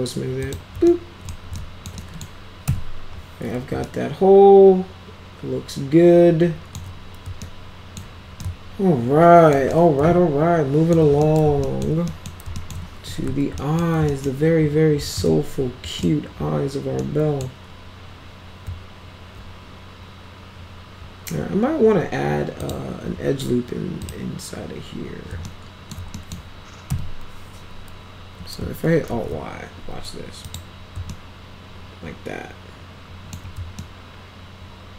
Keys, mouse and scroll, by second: 0.3 click, 0.8 alt+middle click, 1.5 alt+middle click, 1.9 right click, 2.6 F4, 3.7-6.7 alt+right drag, 7.4 alt+middle click, 8.3-9.4 alt+middle drag, 9.7-10.8 alt+middle drag, 11.2 middle click, 11.6 alt+middle click, 12.0 middle click, 12.5 alt+middle click, 12.7-13.7 typing, 13.5 middle click, 14.0 middle click, 15.0 z, 16.9 right click, 17.3 middle click, 22.5 click, 24.0 click, 25.4 alt+middle click, 26.1 middle click, 26.8 F4, 29.0 alt+y, 30.4 click, 31.0-33.2 alt+middle drag, 33.7-34.9 alt+middle drag.